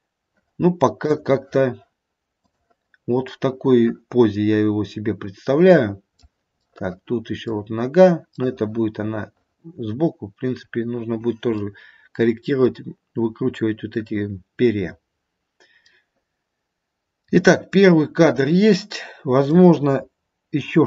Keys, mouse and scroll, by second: 1.1 click, 3.3 middle click, 4.5 middle click, 6.1 middle click, 6.6 middle click, 7.4 middle click, 8.2 middle click, 9.2 middle click, 9.8 middle click, 10.5 middle click, 11.5 middle click, 15.8 middle click, 16.9 middle click, 18.8 middle click.